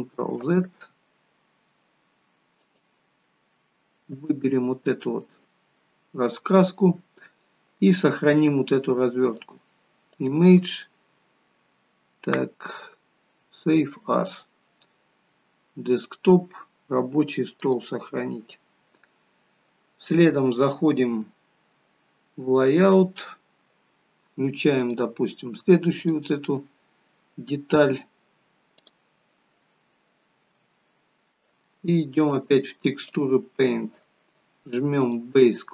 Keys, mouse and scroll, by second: 0.1-0.4 scroll up 1, 2.5 click, 22.7 click, 24.8 click, 26.8-28.8 scroll down 1, 28.8 click, 28.8 scroll down 3, 29.7 scroll up 3, 30.7 shift+middle click, 32.2 click, 35.0 click.